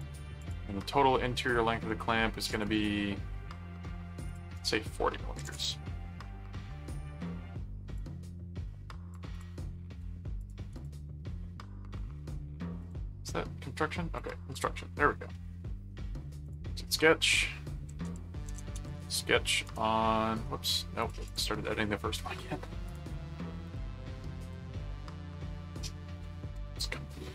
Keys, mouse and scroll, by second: 2.5 click, 4.3 click, 7.9 click, 9.4 click, 10.4 alt+click, 10.7 alt+c, 12.8 click, 14.1 click, 15.3 middle click, 16.4 click, 17.8-19.4 typing, 19.6 Return, 21.0 click, 22.8 click, 23.6 click, 24.4 ctrl+click, 26.2 ctrl+1.